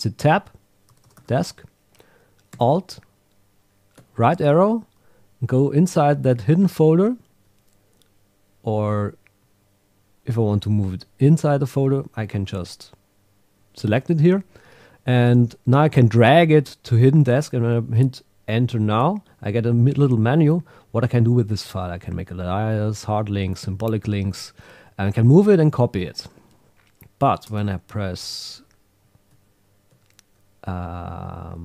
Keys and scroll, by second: 4.0 alt+Right, 5.5 Right, 7.4 Left, 9.4 Right, 10.2 Left, 18.8 Return, 28.2 Down, 29.3 alt+Left, 29.9 alt+Right.